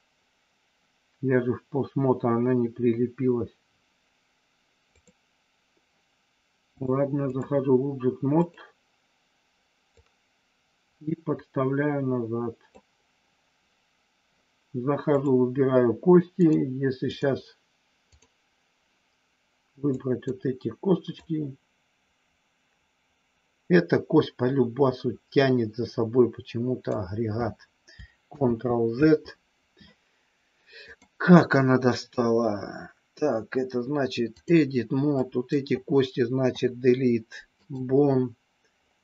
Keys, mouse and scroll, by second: 4.9 click, 6.9 click, 8.4 click, 10.0-12.8 drag, 15.0 click, 16.4 click, 18.2 click, 19.9 click, 21.2-27.0 drag, 28.4 ctrl+z, 30.9-34.5 drag, 35.3 click, 36.5 Delete.